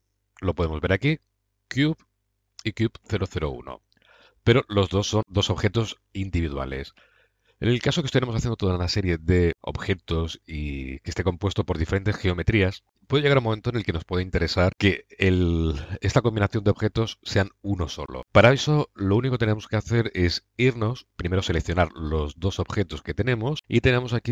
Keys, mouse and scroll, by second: 8.0-9.5 middle drag, 9.5 middle click, 11.5 middle drag, 12.8 right drag, 15.7 right click, 15.8 middle click, 16.7 click.